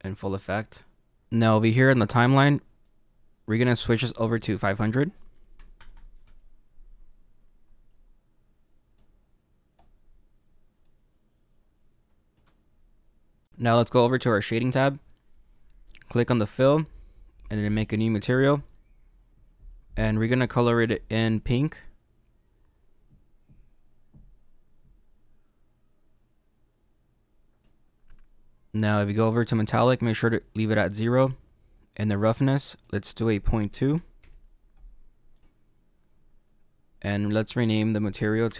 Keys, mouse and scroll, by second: 1.7-2.8 scroll down 1, 2.8-5.9 drag, 5.9 KP_0, 7.2-8.9 scroll down 8, 8.9-10.0 drag, 10.0-10.8 scroll down 3, 10.8 click, 14.7 click, 16.4 click, 18.0 click, 21.5 click, 34.2 click, 35.3 click.